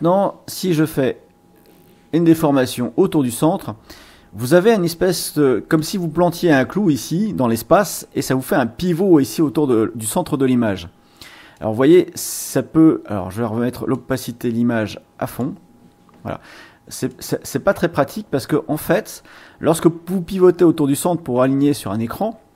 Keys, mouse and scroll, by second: 11.5-12.6 drag, 13.9-15.6 drag, 17.0-19.3 drag.